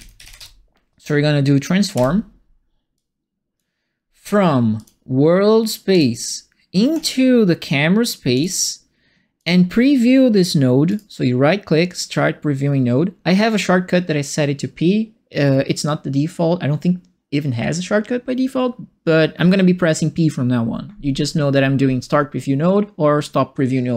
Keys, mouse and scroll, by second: 0.0-0.8 typing, 1.9 Return, 2.9 click, 4.7 click, 5.9 click, 6.9 click, 8.3 click, 9.3 click, 10.8 right click.